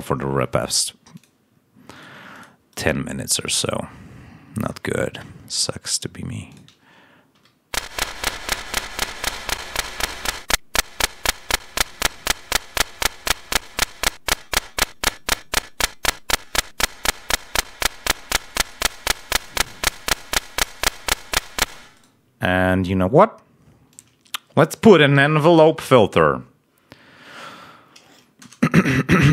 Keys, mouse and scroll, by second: 1.1 click, 1.8 right click, 2.2 click, 2.6 right click, 4.5-5.1 scroll down 2, 6.4 click, 7.2 l, 8.9 click, 10.2-11.4 drag, 12.9 click, 14.0-17.2 drag, 17.5 click, 21.8 space, 21.9 right click, 23.8 click, 25.1-26.1 typing.